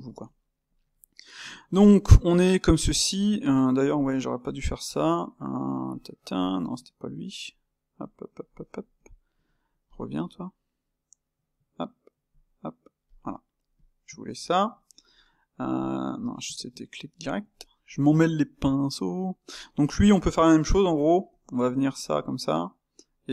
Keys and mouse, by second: 3.9 click, 5.8 click, 8.9 click, 11.1 space, 13.7 click, 15.7 shift+q, 17.3 shift+q, 17.5-18.8 ctrl+middle drag, 18.8 click, 19.4-21.4 middle drag, 21.4 g.